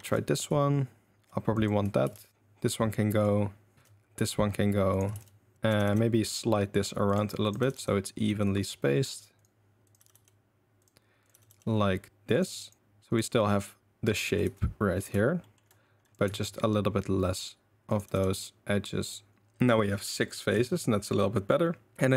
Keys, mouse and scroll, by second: 0.0 ctrl+z, 1.5 click, 2.0 ctrl+x, 3.2 click, 3.7 ctrl+x, 5.1 ctrl+x, 5.5 ctrl+z, 5.7 g, 7.4 click, 7.6 g, 10.0 g, 11.3 g, 12.6 click, 12.8 g, 14.2 a, 14.4 a, 15.4 shift+right click, 16.3 ctrl+x, 18.0 g, 20.5 ctrl+x, 21.9 a.